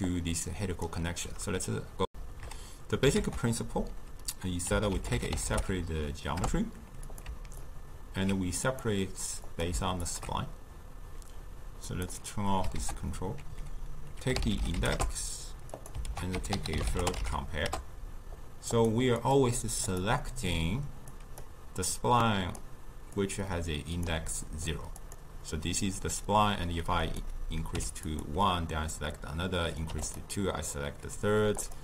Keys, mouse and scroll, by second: 0.1 click, 2.1 w, 3.2 ctrl+a, 6.0 Down, 7.6-8.7 alt+right drag, 8.7-10.2 drag, 11.9 click, 12.8 ctrl+a, 16.1 ctrl+a, 19.2-21.2 drag, 21.9-23.3 drag, 25.0 click, 27.1-28.2 drag, 29.6 click, 31.6 click.